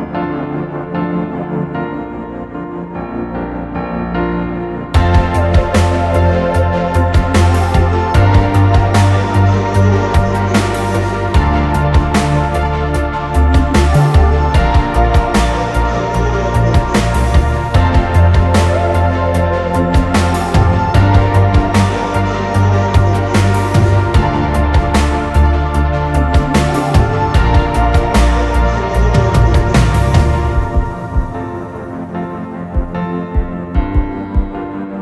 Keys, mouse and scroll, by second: 0.4 click, 0.6-2.4 typing, 4.1-5.1 typing, 4.1-4.6 drag, 6.1-9.1 typing, 11.8 m, 13.0 middle click, 13.2-13.5 scroll down 1, 13.5 click, 13.5 space, 13.8 middle click, 14.0 m, 15.6 ctrl+s, 16.4 space, 17.5 typing, 19.2 scroll down 2, 20.6 middle click, 20.8 space, 22.0 middle click, 22.0 space, 22.6-23.1 scroll down 2, 23.1 scroll up 2.